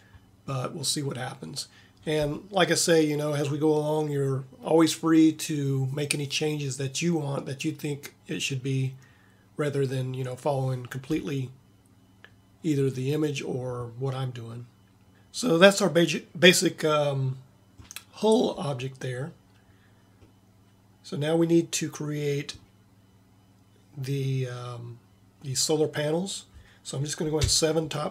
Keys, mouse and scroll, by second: 15.1 Tab, 27.5 KP_7, 27.6 KP_7.